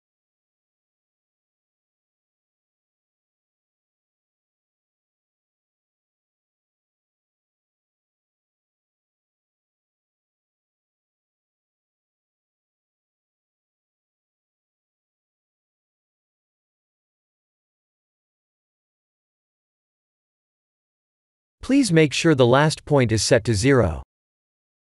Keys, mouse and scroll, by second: 3.1 e, 6.4 e, 9.2 e, 11.9 e, 15.9 shift+middle click, 16.9 e, 21.7 e.